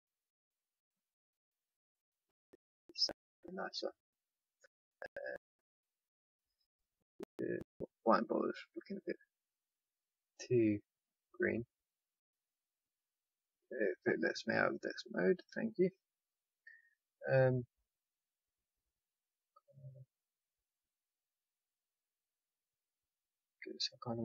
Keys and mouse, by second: 6.5 click, 8.1-12.0 drag, 12.8 click, 14.6-20.7 drag.